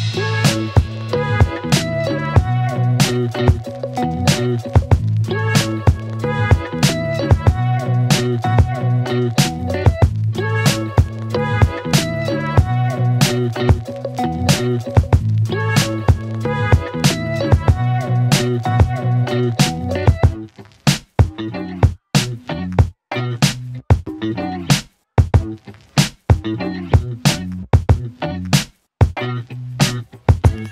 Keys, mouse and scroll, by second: 7.9 click, 11.4-13.1 click, 15.2 click, 21.9-23.7 click, 24.1 ctrl+z, 27.0 click, 27.9-28.4 scroll up 1, 29.4-30.7 click.